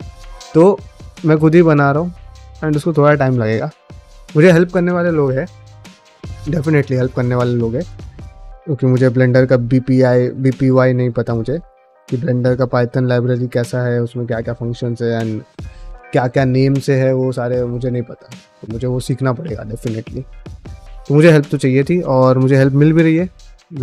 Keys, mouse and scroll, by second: 18.6 middle click, 19.7 middle click, 20.1 shift+middle click, 20.4-21.6 middle drag.